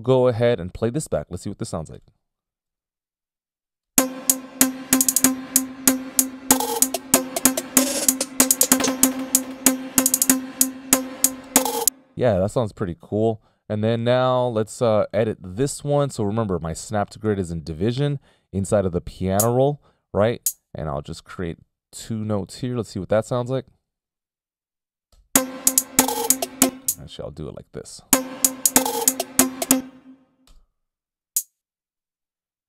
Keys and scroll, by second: 0.3 F19, 0.3 *, 3.0 t, 3.2 space, 5.3 z, 11.9 space, 14.5 F18, 14.6 /, 25.5 c, 25.6 space, 28.4 alt+space, 30.6 ,, 31.0 space.